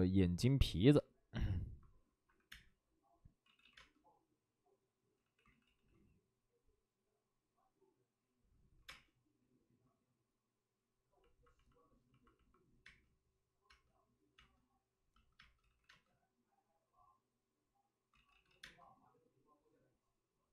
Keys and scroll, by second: 2.2 1, 2.4 space, 3.4 ctrl+z, 3.5 ctrl+z, 3.6 space, 5.1 ctrl+z, 8.7 5, 8.7 space, 12.7 space, 12.8 space, 14.1 space, 14.3 space, 15.3 space, 15.8 ctrl+z, 15.8 space, 18.0 ctrl+z, 18.5 ctrl+z, 18.5 space.